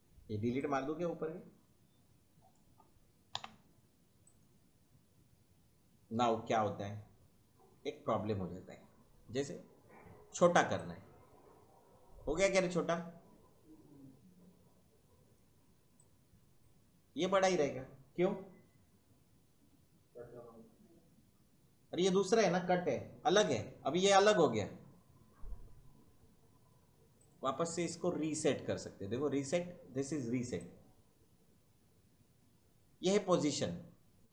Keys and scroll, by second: 3.4 Delete.